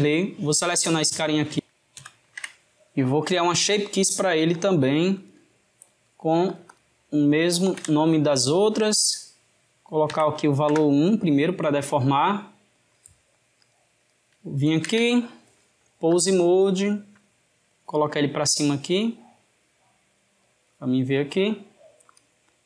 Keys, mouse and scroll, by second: 3.2-4.5 middle drag, 4.5-5.7 drag, 5.7-6.5 middle drag, 6.5 click, 6.7-8.9 drag, 9.1-12.2 drag, 13.6 click, 14.8 ctrl+Tab, 16.1-18.3 drag, 22.1-22.6 drag.